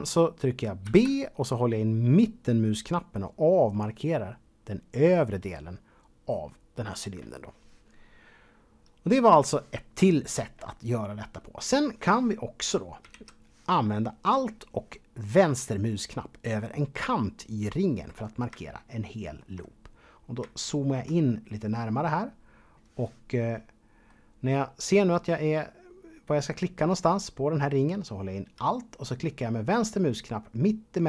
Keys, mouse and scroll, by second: 0.8 b, 2.4 middle click, 13.1 alt+a, 18.7 shift+middle click, 19.7-20.0 scroll up 2, 20.5-22.1 shift+middle drag, 22.1-23.5 scroll up 2, 23.5 middle click.